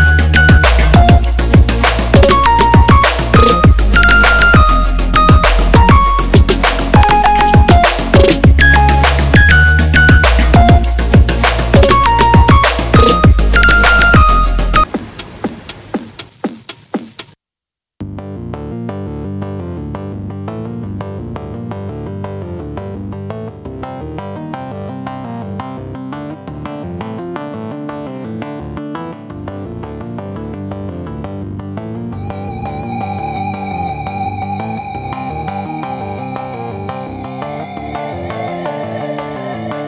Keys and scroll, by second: 2.5 m, 19.1 ctrl+d, 22.8 ctrl+z, 24.3 x, 24.8 ctrl+z, 31.5 ctrl+z, 34.9 ctrl+z, 37.4 x, 38.8 x.